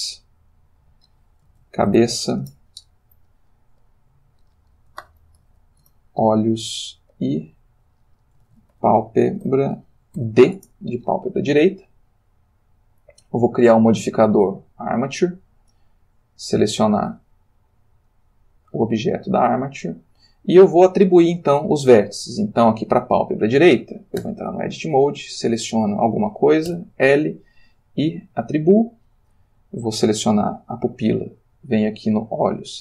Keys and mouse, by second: 0.3 click, 1.5-2.0 typing, 2.4 shift+Return, 3.9 click, 5.0 shift+o, 5.3 shift+h, 5.5 shift+o, 5.6 shift+s, 5.9 shift+Return, 7.2 click, 8.4-10.2 typing, 10.5 shift+Return, 13.4 click, 14.2 click, 14.7 click, 16.5 click, 18.1 click, 19.9 click, 24.2 Tab, 25.1-25.6 drag, 26.7 l, 28.3 click, 30.0-30.8 drag, 32.1 click.